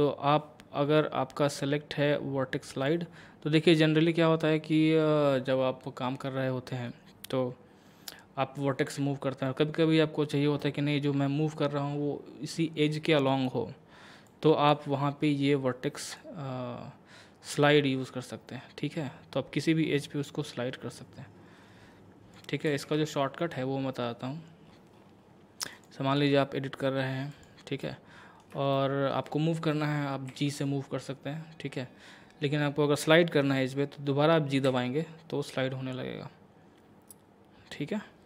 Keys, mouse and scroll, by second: 1.0-5.5 drag, 14.3-16.2 drag, 16.5-22.7 drag, 22.7 ctrl+z, 24.7-25.0 scroll up 1, 25.7 click, 27.8 middle click, 30.3 g, 34.7 g.